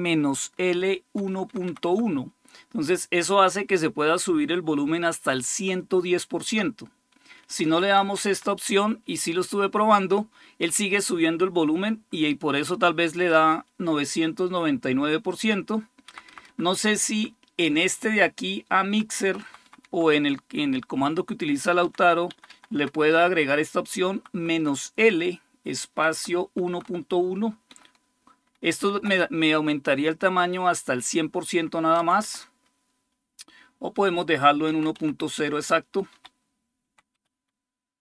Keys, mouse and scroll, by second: 0.9 Right, 1.2 Right, 1.3 Right, 1.4 Right, 1.7 Right, 7.3 Left, 7.6 Left, 7.8 Left, 8.1 Left, 15.9 Up, 16.3 Up, 16.9 Up, 17.4-18.7 Left, 19.0 Left, 19.0 Right, 19.2 Right, 19.4 Right, 19.6 Right, 21.6 Down, 22.1 Down, 22.3 Down, 22.5 Down, 22.9-24.1 Right, 24.4 Right, 25.9 Right, 26.2 Right, 28.6 Left, 28.8 Left, 31.8 Right, 32.0 Right, 33.7-37.7 typing, 34.1 Delete, 34.5 Down, 34.7 Left, 36.6 Down.